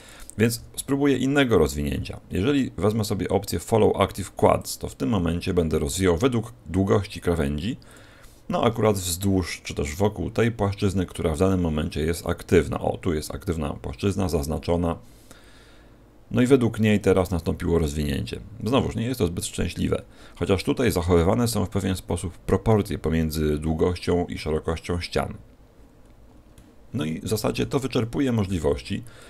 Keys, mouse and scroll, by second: 0.5 u, 9.9 middle click, 13.9-15.6 scroll up 1, 16.0-18.9 scroll up 4, 18.9-19.3 scroll down 2, 19.9-20.2 scroll down 2, 20.8-21.4 scroll up 4, 23.3-25.9 scroll up 1, 25.9-27.5 scroll down 7, 26.5 middle click, 28.4 u.